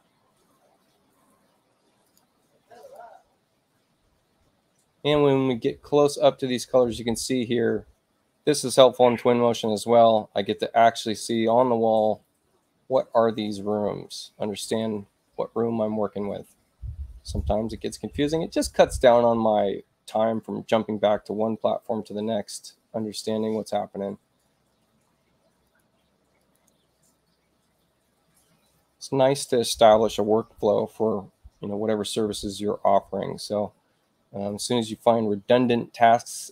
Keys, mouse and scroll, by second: 2.0 click, 2.8 click, 25.6 click, 26.4 click, 29.3 click.